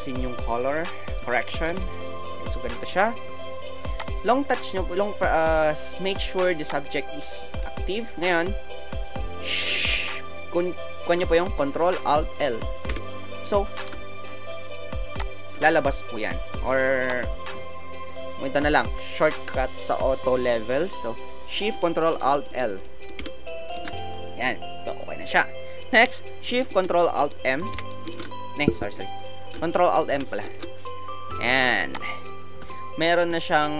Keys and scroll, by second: 12.8 ctrl+alt+l, 23.2 ctrl+alt+shift+l, 27.7 ctrl+alt+shift+m, 28.8 ctrl+alt+shift+Escape, 30.1 m.